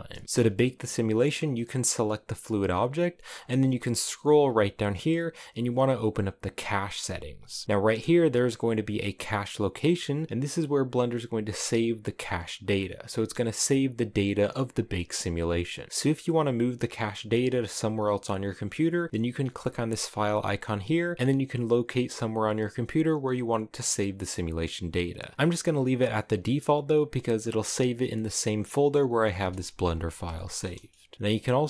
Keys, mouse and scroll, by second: 0.2-9.7 shift+middle drag, 9.7 click, 12.5 click, 14.7 click, 18.0 click, 28.9-31.6 middle drag.